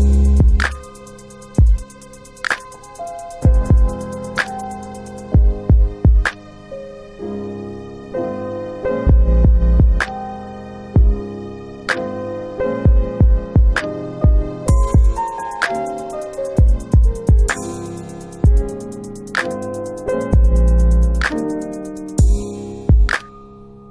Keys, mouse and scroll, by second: 0.3 alt+click, 2.0 alt+click, 2.2 alt+right click, 2.6 alt+right click, 2.9 alt+click, 2.9 alt+click, 3.8 alt+middle click, 4.1 alt+right click, 4.3 alt+right click, 4.7 alt+click, 5.5 alt+click, 5.8 alt+click, 6.3 alt+middle click, 6.4 alt+middle click, 6.8 alt+right click, 6.8 alt+right click, 7.1 alt+click, 7.4 alt+click, 7.7 alt+right click, 7.9 alt+right click, 8.2 alt+click, 8.5 alt+click, 8.9 alt+middle click, 8.9 alt+middle click, 9.3 alt+right click, 10.3 alt+right click, 10.9 click, 15.3 click, 17.7 click, 21.0 click, 22.8 click, 23.2 alt+click.